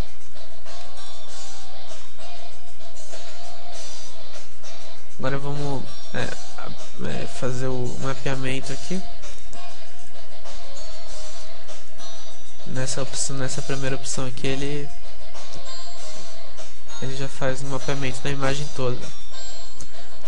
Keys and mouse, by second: 0.0 click, 0.7-2.0 middle drag, 1.1-3.1 drag, 1.7 alt+z, 3.1-7.1 middle drag, 7.1 Tab, 10.1 u, 12.4 Tab, 12.4-13.5 middle drag, 12.9 Tab, 15.9 Tab, 15.9 u, 17.4 Tab.